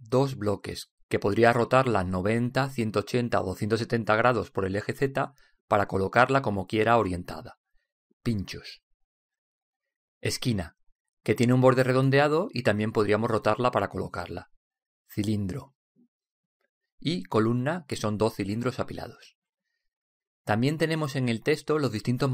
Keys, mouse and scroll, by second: 0.2 click, 0.5-2.1 drag, 7.3 middle click, 9.7-11.3 drag, 12.9 click, 14.3-15.5 middle drag, 16.0-17.8 drag, 18.2-19.9 drag.